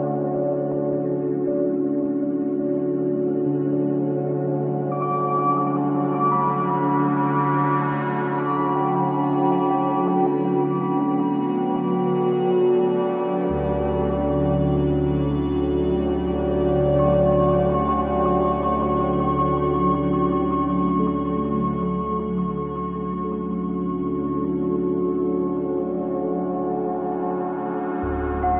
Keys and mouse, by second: 0.6 shift+click, 1.2 shift+click, 1.7 shift+click, 2.4 shift+click, 4.6 shift+click, 5.2 shift+click, 5.9 shift+click, 6.6 shift+click, 7.1 shift+click, 7.7 shift+click, 9.6 e, 12.1 Tab, 12.6 Tab, 18.9 click, 20.0 shift+click, 20.6 shift+click, 21.1 shift+click, 21.6 shift+click, 22.2 shift+click, 22.8 shift+click, 23.4 shift+click, 27.9 e.